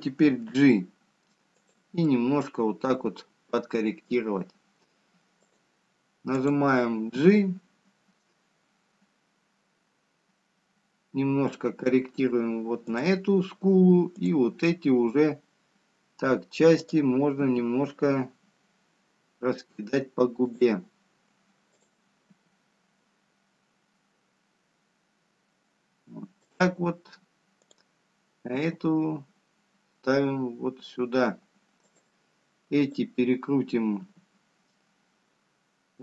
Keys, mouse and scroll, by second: 0.9 middle click, 2.9 g, 4.7 middle click, 9.5 click, 9.5 g, 16.4 click, 19.1 click, 20.3 g, 25.0 click, 30.0 click, 31.1 g, 35.6 click.